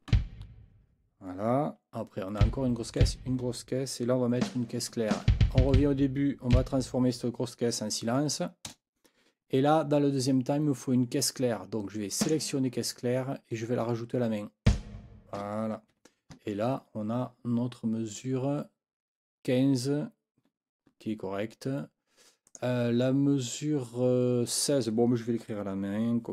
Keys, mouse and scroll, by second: 0.1 b, 2.4 b, 3.1 b, 4.4 a, 5.1 Left, 5.6 Left, 6.5 Right, 8.7 KP_0, 12.2 click, 14.6 click, 15.9 Escape, 22.4 click.